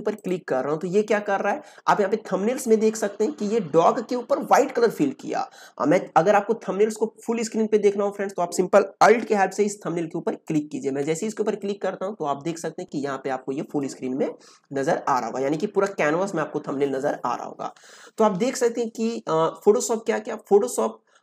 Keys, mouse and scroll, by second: 0.1 click, 9.5 click, 10.4 alt+click.